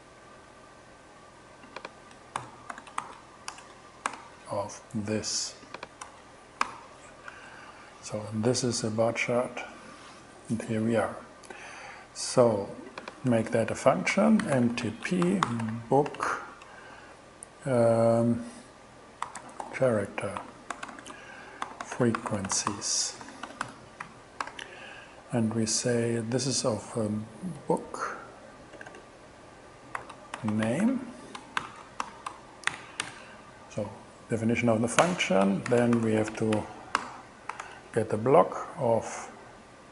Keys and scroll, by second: 2.2-3.5 typing, 4.1 alt+5, 6.1 BackSpace, 6.7 alt+6, 7.3 alt+shift+6, 8.0 shift+Return, 13.3 Return, 13.8 Up, 14.2-16.3 typing, 19.0-24.2 typing, 24.5 alt+5, 27.6 b, 28.8-33.1 typing, 32.7 alt+shift+., 35.0 Return, 35.5-36.8 typing, 37.0 alt+5, 37.5 alt+8, 37.7 alt+9.